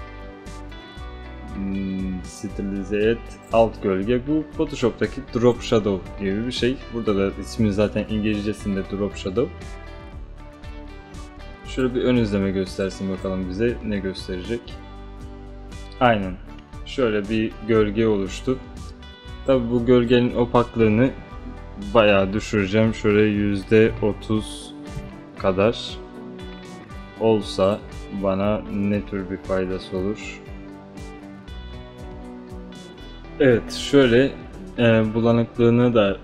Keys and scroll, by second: 24.0 3, 25.1 0.